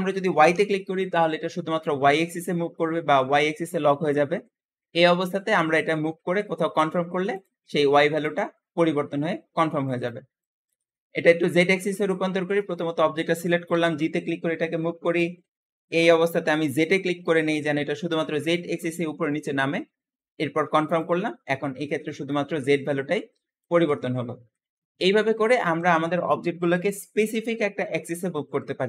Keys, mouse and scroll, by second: 11.4-13.6 shift+middle drag, 13.6 g, 24.2-24.6 scroll down 4, 24.6-25.4 shift+middle drag, 25.4 alt+g, 28.7-28.8 shift+middle drag.